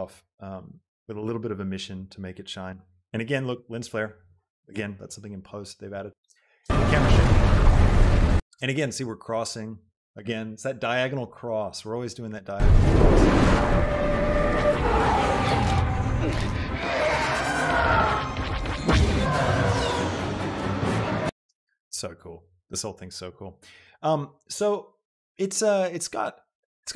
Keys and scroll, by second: 6.4 space, 21.4 space.